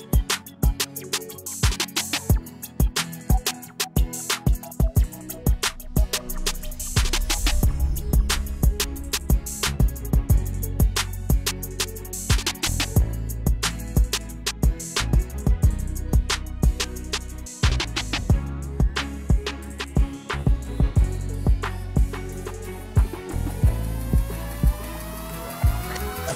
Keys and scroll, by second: 8.0 Caps_Lock, 10.0 a, 11.2 d, 12.5-14.9 typing, 15.9 typing, 18.4-19.2 typing, 21.6-22.7 typing.